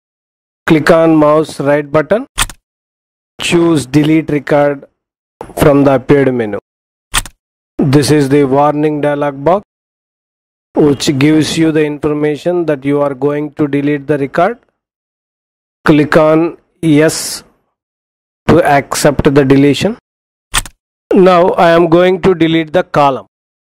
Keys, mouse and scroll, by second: 2.4 right click, 6.9 click, 20.5 click.